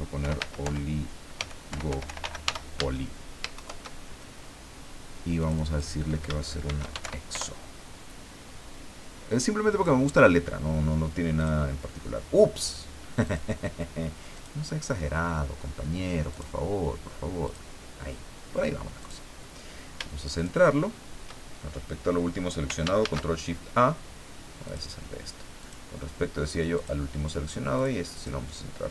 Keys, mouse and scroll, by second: 0.0-2.9 typing, 3.5 shift+Home, 5.4 click, 6.4-7.5 typing, 9.7 click, 11.4 click, 13.2 click, 14.3 click, 16.3 click, 17.4 click, 19.0 click, 20.3 shift+click, 23.0 ctrl+shift+a, 24.6 click, 25.6 click, 26.7 click, 27.7 click, 28.1 click.